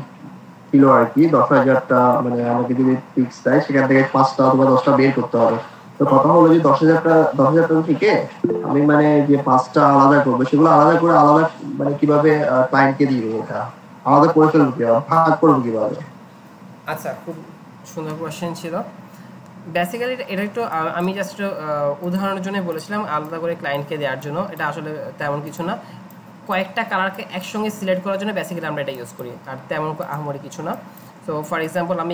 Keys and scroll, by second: 18.4 alt+Tab.